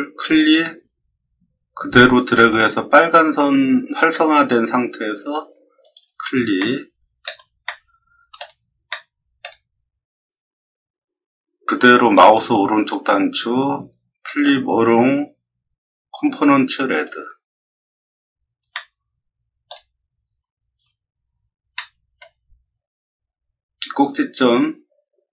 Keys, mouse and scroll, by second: 0.2 click, 5.8 click, 6.5 middle click, 7.6-8.3 shift+middle drag, 8.8 middle click, 12.1 right click, 14.2 click, 16.8 click, 18.7-19.6 middle drag, 20.1-20.4 scroll up 1, 20.9 middle click, 21.1 middle click, 21.7-22.1 middle drag, 22.5 scroll up 1, 22.6 middle click.